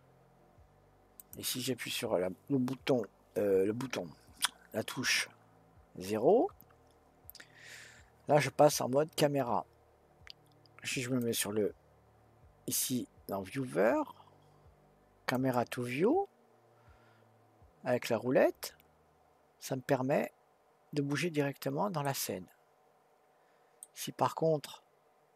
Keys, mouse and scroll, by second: 1.2 click, 6.5 KP_0, 11.2 click, 15.3 click, 20.7 scroll down 2, 22.0-25.1 middle drag.